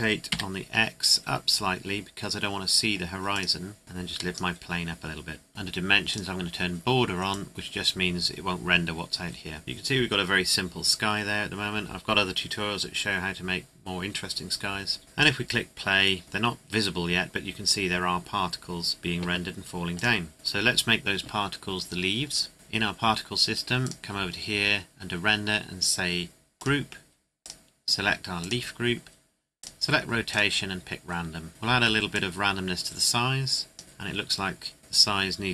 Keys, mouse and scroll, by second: 0.3 x, 3.3 click, 9.2 scroll up 1, 9.6 click, 15.2 click, 19.9 click, 20.3 middle click, 21.4-22.5 scroll down 1, 22.5 scroll up 1, 23.8 click, 24.0-25.0 scroll down 1, 26.6 click, 32.1 click, 33.8 scroll up 1, 34.8 KP_0.